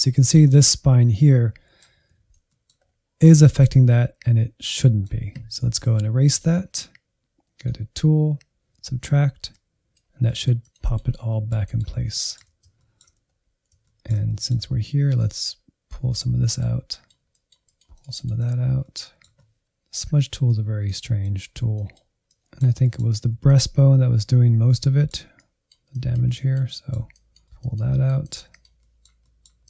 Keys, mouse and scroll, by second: 2.1 alt+z, 2.5 middle click, 2.8-3.8 scroll up 2, 3.8-6.2 middle drag, 6.2-11.1 drag, 11.1 scroll down 2, 11.3 middle click, 11.6 click, 12.1-13.2 middle drag, 13.2 scroll up 1, 13.3 shift+middle click, 13.7 click, 14.6 alt+z, 15.4 click, 16.2 shift+middle click, 16.7 alt+z, 16.8-18.2 drag, 18.2 middle click, 18.4 click, 18.8 middle click, 18.9 click, 19.6 middle click, 20.2-22.4 drag, 22.4 middle click, 23.3 ctrl+click, 23.8 middle click, 24.4 click, 25.3 middle click, 25.5-26.6 drag, 26.6 middle click, 26.8-27.9 drag, 27.9 middle click, 28.2-29.4 drag, 29.4 middle click, 29.6 click.